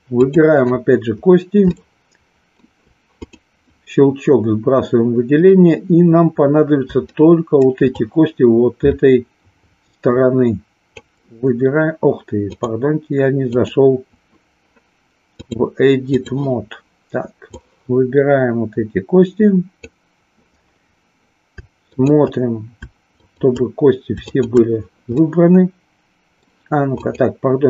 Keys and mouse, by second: 0.1 click, 1.8-2.6 shift+middle drag, 7.1-7.7 shift+middle drag, 8.0-11.1 drag, 12.5 click, 13.5 click, 15.3 click, 17.4-19.8 drag, 22.0 shift+click, 23.2 shift+click, 24.2 shift+click, 25.2-26.5 middle drag, 26.8 click.